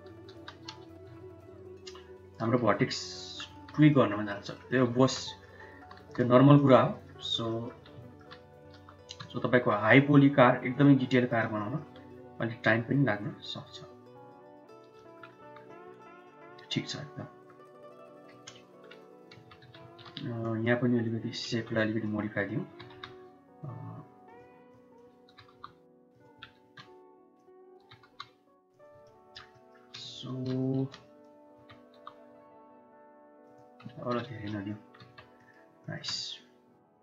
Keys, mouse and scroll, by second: 0.3 g, 2.4 Tab, 3.0 middle click, 3.3 Tab, 3.8 middle click, 4.3 middle click, 4.8 shift+middle click, 5.1 middle click, 5.9 3, 6.8 shift+middle click, 7.1 shift+click, 7.3 middle click, 8.0 shift+middle click, 8.6 i, 11.0 middle click, 11.5 shift+middle click, 13.3-14.6 shift+drag, 15.3 Tab, 15.6-17.3 middle drag, 18.2 KP_7, 19.2 Tab, 19.7 shift+z, 20.5 click, 21.3 1, 21.8 click, 22.6 g, 24.6 click, 25.1 g, 27.0 click, 27.7 g, 29.0 shift+middle click, 29.4 shift+middle click, 30.0 shift+z, 30.4 shift+z, 30.8 click, 31.4 g, 33.7 Tab, 34.2 shift+z, 34.3-34.7 drag, 34.9 Tab, 35.2 drag, 35.9-37.0 shift+middle drag.